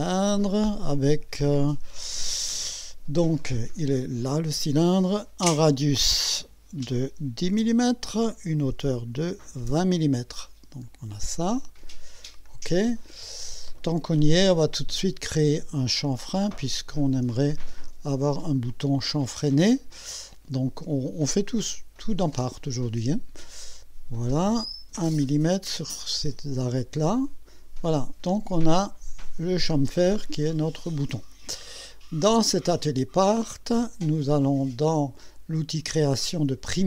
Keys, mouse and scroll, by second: 3.9 click, 6.2 click, 7.5 KP_1, 7.6 KP_0, 8.5 click, 9.2 KP_2, 9.7 KP_0, 10.4-10.7 scroll down 2, 11.3-11.9 right drag, 11.9 click, 12.5-13.2 drag, 13.4 scroll down 1, 13.8 right click, 16.1 click, 17.5 ctrl+click, 23.6 click, 27.0 click.